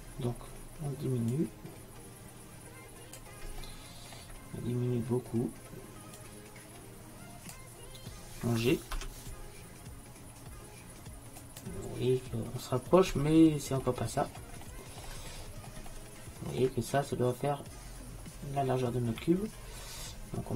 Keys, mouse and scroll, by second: 1.4-3.7 drag, 4.0-5.5 middle drag, 6.2-8.1 drag, 9.0 g, 12.2 middle click, 13.7 middle click.